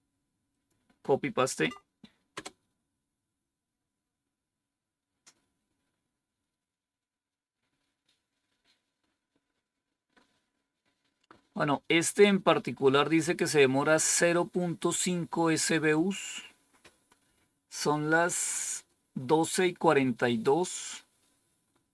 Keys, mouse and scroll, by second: 0.4 click, 1.6 Right, 2.3 Return, 14.7-15.9 drag.